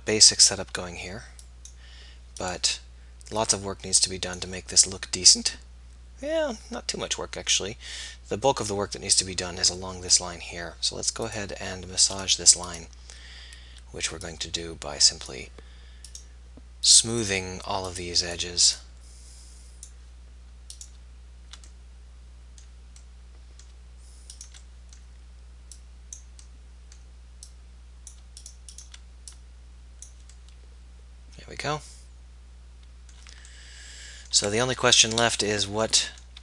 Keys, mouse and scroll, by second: 5.7 middle click, 6.0 click, 11.3-20.7 drag, 21.8-23.3 middle drag, 23.5 middle click, 24.8-27.1 middle drag, 30.3 middle click, 31.7 middle click, 33.9-35.2 middle drag, 35.4 middle click, 36.3 z.